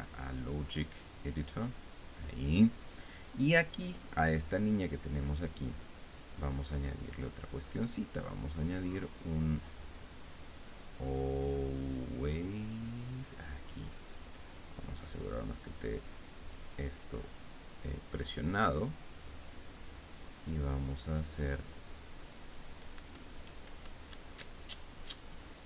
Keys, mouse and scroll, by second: 0.4 click, 2.4 click, 7.1-9.1 drag, 10.2 click, 13.9 click, 15.9 click, 19.4-20.7 drag, 22.0 click.